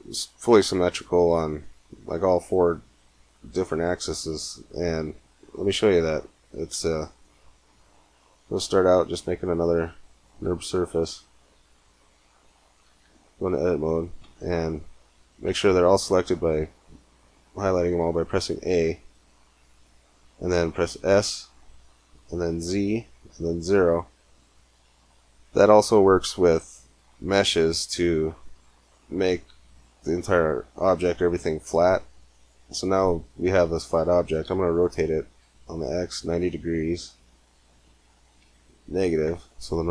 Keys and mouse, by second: 3.6 middle click, 5.2 Tab, 6.5 x, 8.4 shift+a, 12.8 Tab, 14.0 a, 15.2 a, 19.0 KP_Decimal, 21.0 s, 28.6-30.4 middle drag, 34.6 r.